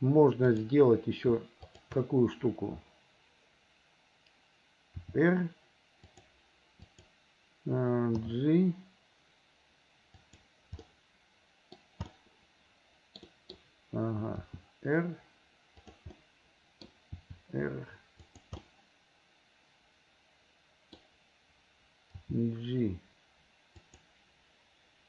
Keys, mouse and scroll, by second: 0.6 click, 1.6 shift+click, 5.1 r, 6.9 click, 8.1 g, 10.9 scroll up 1, 11.0 middle click, 11.8-12.1 scroll down 1, 12.1-13.2 middle drag, 13.3 scroll up 1, 13.6 scroll down 1, 14.5 r, 16.2 middle click, 17.2 r, 18.6-21.0 middle drag, 22.1 g.